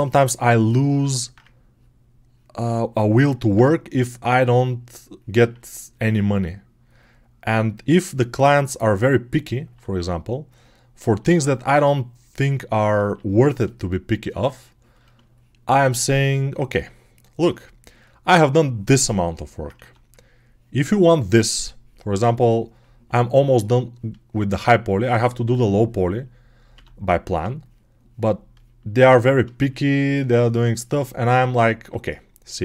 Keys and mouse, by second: 3.5-17.2 ctrl+drag, 12.9 ctrl+z, 14.1 ctrl+z, 19.6 1, 26.6 1, 30.0-32.6 shift+drag.